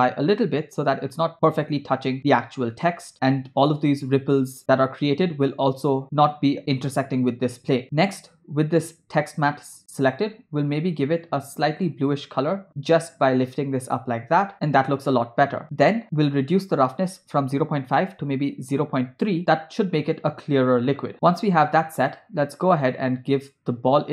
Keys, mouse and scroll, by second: 7.8 click, 10.1 click, 16.0 scroll down 1, 16.5-19.4 drag, 19.4 space, 21.1 space, 21.5 space, 21.9 space, 23.2 space, 24.0 space.